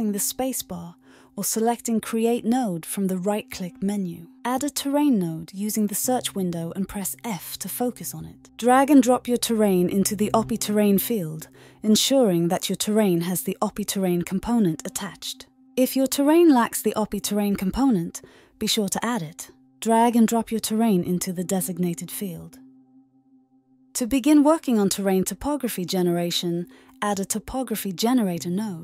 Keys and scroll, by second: 0.0-0.4 typing, 0.9 Return, 2.5-3.3 typing, 17.1 ctrl+a, 17.2-18.2 typing, 18.6 Return, 23.3 typing, 26.7-27.9 typing.